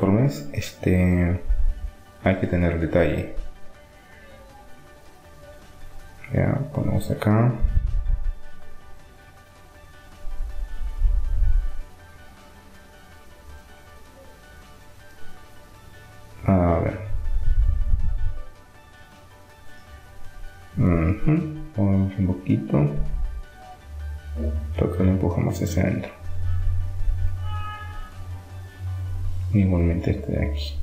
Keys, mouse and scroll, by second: 1.1 s, 5.7-7.4 drag, 7.4-14.7 middle drag, 14.7-18.7 right drag, 19.2-20.4 right drag, 20.7-22.2 drag, 23.1-25.7 right drag, 25.0 click, 26.3 click, 28.0-29.7 drag, 29.4-30.8 right drag.